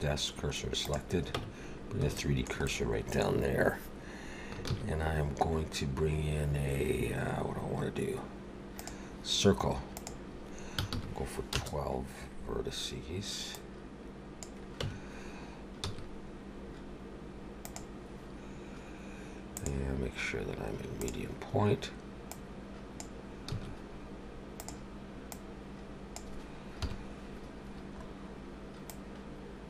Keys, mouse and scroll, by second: 1.4 Tab, 2.1 shift+middle click, 2.7 middle click, 4.6 shift+a, 9.9 click, 13.5 click, 14.8 Tab, 15.8 s, 19.5 click, 22.3 click, 23.5 s, 25.3 click, 26.8 KP_7, 27.8-28.4 scroll up 2, 28.9 click.